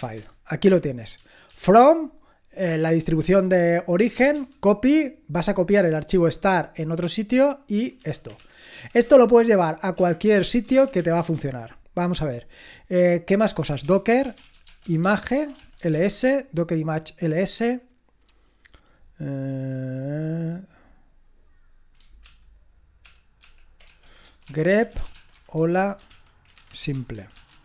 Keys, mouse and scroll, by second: 1.2 typing, 4.0-4.3 typing, 7.5-11.4 typing, 9.9 Escape, 13.6-16.4 typing, 23.5 ctrl+p, 23.9-27.6 typing.